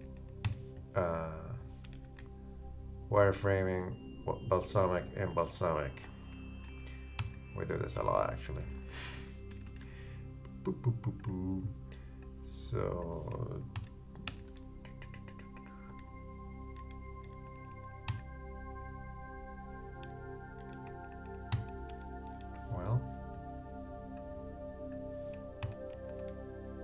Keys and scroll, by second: 0.4 super+d, 1.9 shift+Up, 2.2 shift+Right, 5.0 shift+Right, 7.2 shift+super+d, 13.7 super+d, 14.3 shift+super+d, 14.4 shift+super+Left, 14.6 shift+Down, 17.2 shift+Down, 18.1 shift+super+d, 20.1 shift+Down, 21.1 shift+super+Up, 21.5 shift+super+d, 22.0 shift+super+Down, 22.4 shift+Up, 25.6 super+d, 26.1 shift+super+Left, 26.3 shift+Down.